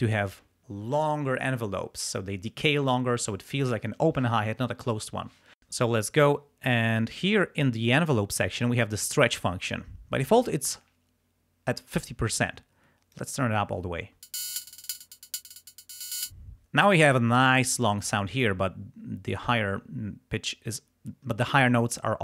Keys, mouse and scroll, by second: 12.5 click, 14.1 space, 16.3 space.